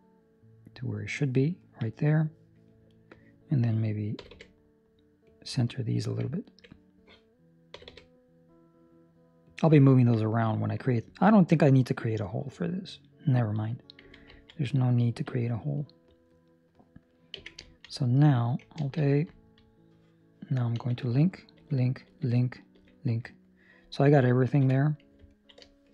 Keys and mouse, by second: 1.5 ctrl+middle click, 1.9 middle click, 2.8 alt+right click, 4.1 g, 6.3 alt+right click, 7.7 g, 9.9 ctrl+middle click, 10.1 middle click, 11.0 ctrl+middle click, 11.3 middle click, 14.2 Tab, 14.3 ctrl+middle click, 14.8 middle click, 15.1 ctrl+middle click, 15.3 middle click, 15.4 ctrl+middle click, 15.7 middle click, 15.8 ctrl+middle click, 16.5 right click, 17.3 Tab, 17.7 ctrl+middle click, 17.8 middle click, 18.7 alt+a, 19.2 Escape, 20.7 l, 23.4 middle click, 23.4 l, 24.6 KP_7, 25.2 ctrl+middle click, 25.5 middle click.